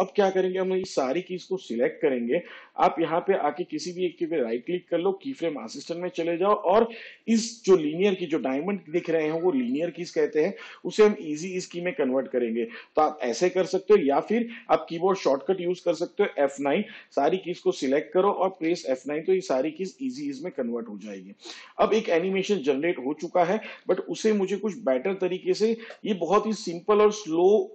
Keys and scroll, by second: 20.7 F9, 26.0 n.